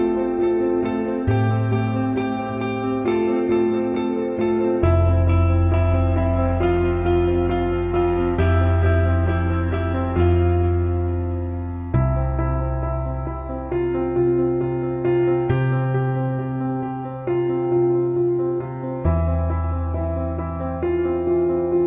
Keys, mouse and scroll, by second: 0.0 middle click, 2.5 middle click, 3.8 middle click, 4.5 middle click, 4.7 middle click, 11.4 middle click, 11.8 middle click, 13.0 middle click, 13.7 middle click, 15.0 middle click, 15.4 middle click, 15.6 middle click, 15.9 middle click, 16.8 middle click, 17.0 middle click, 18.2 middle click, 19.2 middle click, 20.5 middle click, 21.6 middle click.